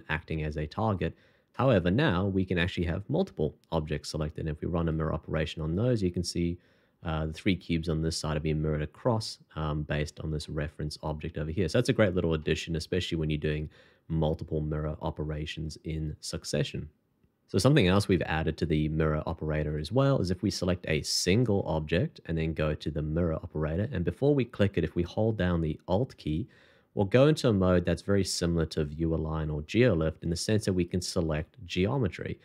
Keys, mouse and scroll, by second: 2.0 shift+click, 3.6 shift+2, 10.4 middle click, 17.3 shift+middle click, 21.6 shift+2, 26.1 alt+click, 31.2 double click.